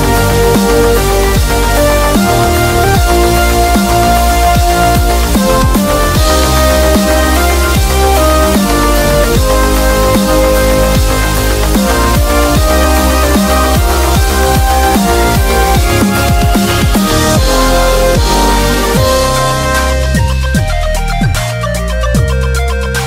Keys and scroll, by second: 0.5 ], 5.3 super+=, 5.5 super+=, 7.3-8.9 typing.